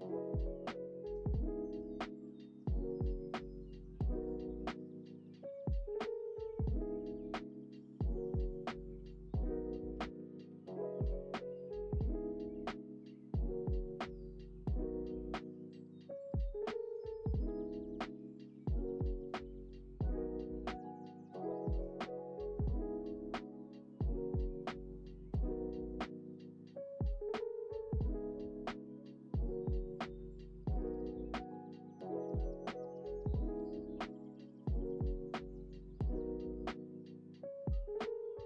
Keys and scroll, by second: 5.8 ctrl+v, 7.8 x, 21.4 space.